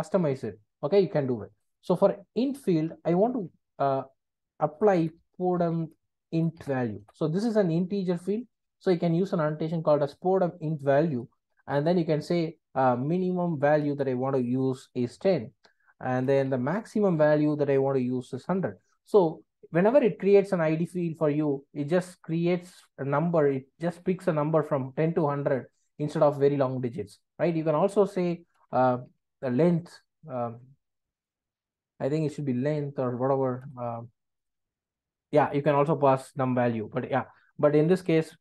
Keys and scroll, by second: 7.0 Return, 13.8 Return, 17.1 Return, 33.6 ctrl+space.